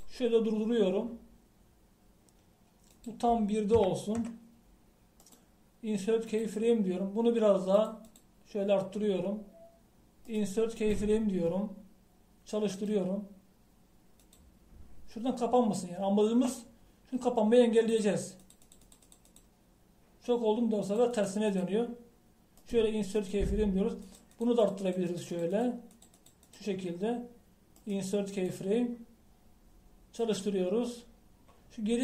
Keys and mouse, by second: 1.1-5.8 drag, 6.3-8.1 right drag, 8.8-11.0 drag, 11.3-18.2 drag, 19.0-23.6 drag, 25.5-28.8 drag, 29.3-32.0 drag.